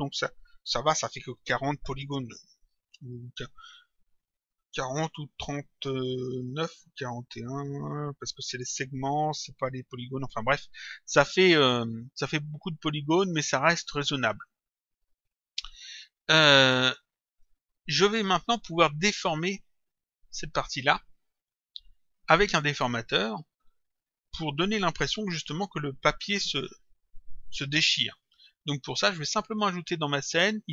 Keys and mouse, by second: 17.3 click, 30.2 click.